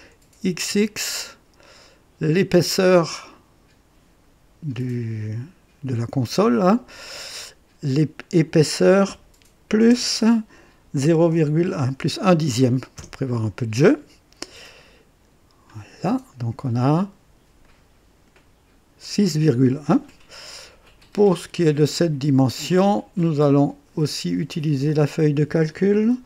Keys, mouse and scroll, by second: 0.4 x, 0.6 x, 3.0 click, 11.0 KP_0, 11.3 KP_Decimal, 11.7 KP_1, 12.9 Return, 15.7 click, 17.6-18.5 drag, 20.9 click, 20.9 typing, 22.6 click, 24.8 click, 26.1 ctrl+v.